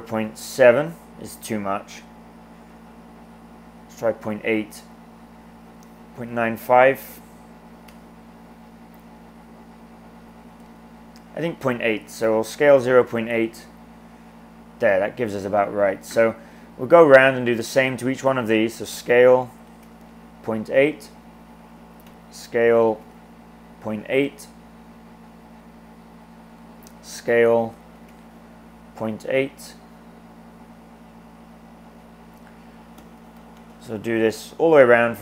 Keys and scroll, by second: 0.0-0.7 typing, 3.9 typing, 6.0-6.7 typing, 10.6 super+z, 12.1-13.4 typing, 18.7-20.1 typing, 22.0-23.3 typing, 26.9-28.4 typing, 32.8-34.0 typing.